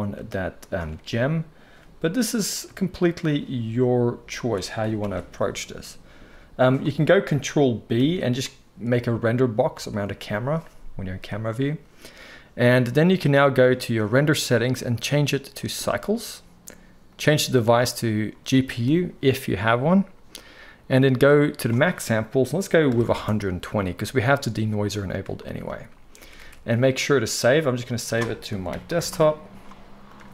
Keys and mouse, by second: 1.8 g, 5.0-14.5 ctrl+right drag, 5.0 ctrl+b, 8.0 ctrl+b, 13.4 click, 26.3 ctrl+s.